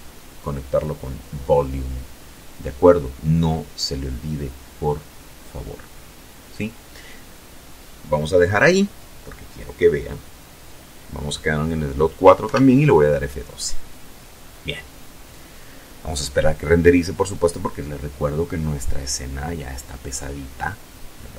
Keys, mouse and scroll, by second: 10.5 F12.